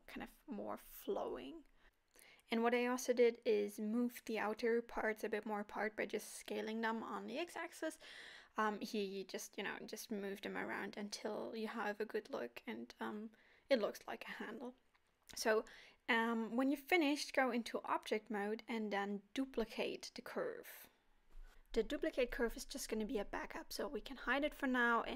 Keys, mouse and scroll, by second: 0.2 alt+a, 0.4 scroll down 2, 0.5 Tab, 0.6 middle click, 2.3 middle click, 2.8 scroll up 1, 3.0 scroll down 2, 3.1 Tab, 3.1 scroll down 1, 3.4 middle click, 3.6 KP_1, 3.8 click, 4.3 shift+click, 4.7 s, 5.8 s, 6.9 click, 7.2 shift+click, 7.4 s, 8.5 click, 8.7 g, 9.5 click, 9.7 g, 12.2 alt+a, 12.4 middle click, 13.4 Tab, 13.8 middle click, 16.4 scroll up 2, 16.7 middle click, 21.2 shift+d.